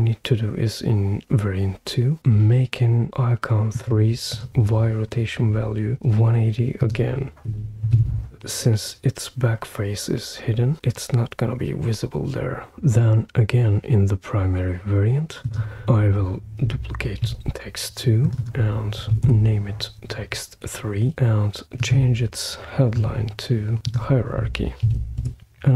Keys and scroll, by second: 7.2-8.4 typing, 17.2 super+d, 19.0 typing, 19.2 Return, 24.9 super+v, 25.2 Return.